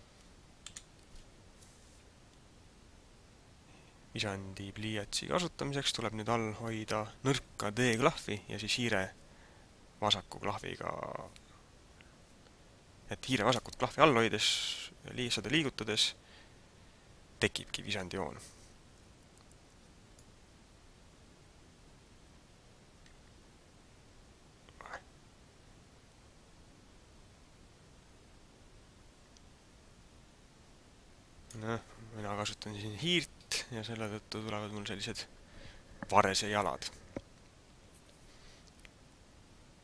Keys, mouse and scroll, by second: 0.8 KP_7, 2.4-2.7 scroll up 2, 19.9 d, 20.3 click, 31.5 d.